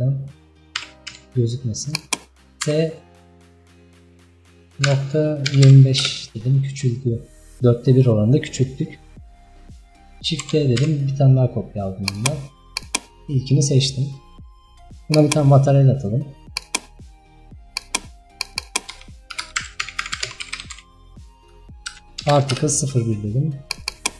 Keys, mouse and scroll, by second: 0.8 g, 2.7 s, 6.7-9.0 scroll up 2, 9.0 scroll down 1, 10.5 shift+d, 12.9 click, 17.9 drag, 18.4 click, 22.6 click, 24.0-24.1 drag.